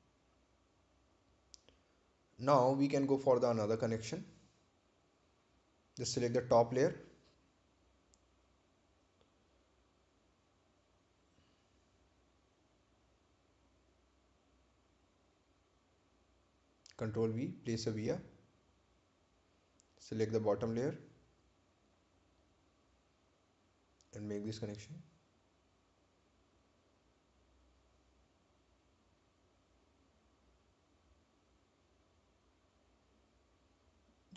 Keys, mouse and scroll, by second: 6.9 right click, 8.3 click, 11.2 click, 18.7 click, 19.3 right click, 22.2 ctrl+v, 23.1 click, 32.5-33.2 scroll down 1, 33.2-33.8 scroll up 1.